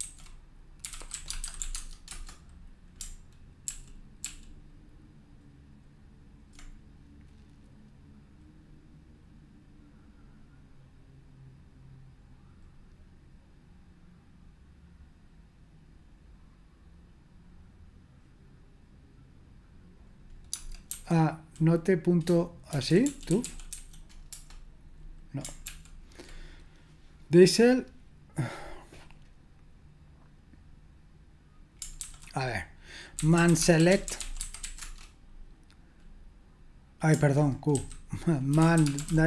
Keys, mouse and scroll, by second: 0.0 ctrl+c, 0.6-2.1 typing, 3.7 ctrl+p, 4.2 ctrl+p, 22.5-24.2 typing, 24.3 Return, 25.6 ctrl+p, 32.0 ctrl+c, 32.9-35.1 typing, 37.8-39.2 typing.